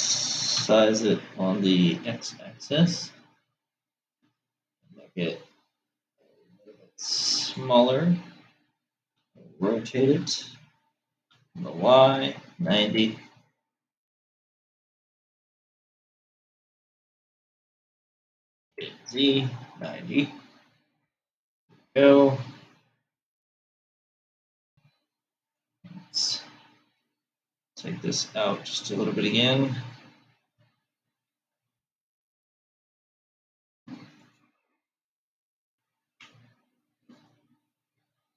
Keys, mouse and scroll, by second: 1.1 s, 9.7 r, 18.7 r, 25.9 click, 29.0 Tab, 31.9 g, 36.9 Tab, 37.8 click.